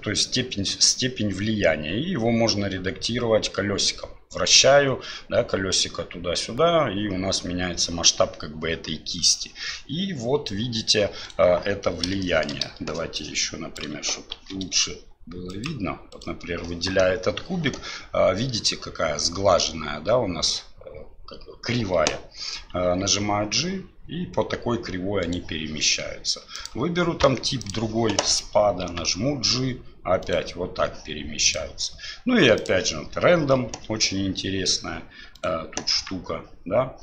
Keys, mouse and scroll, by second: 12.2 shift+middle click, 13.3-13.8 drag, 14.3 shift+d, 16.1 right click, 22.8 g, 26.6-27.9 drag, 28.9 g, 31.5-32.8 drag, 33.8 r, 35.9 g.